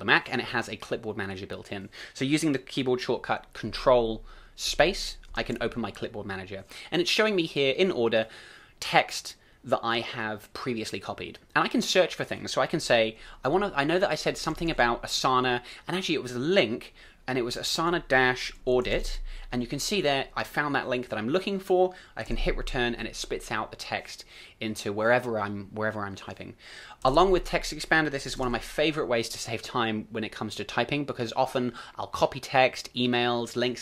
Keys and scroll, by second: 4.6 ctrl+space, 5.3 ctrl+space, 22.4 super+v, 28.4 ctrl+space.